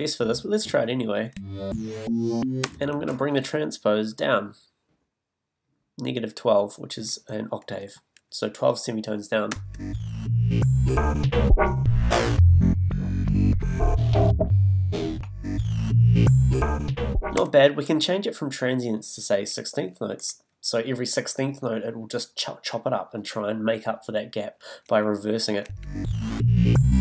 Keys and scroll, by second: 9.5 space, 17.4 space, 25.6 space.